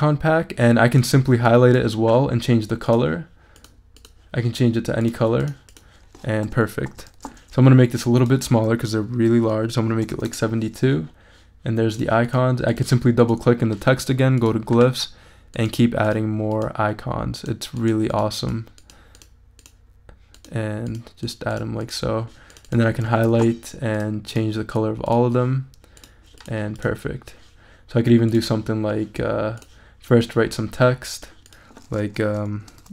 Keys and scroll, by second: 7.1 super+a, 9.8-10.6 typing, 24.3 super+a, 32.5-32.9 typing.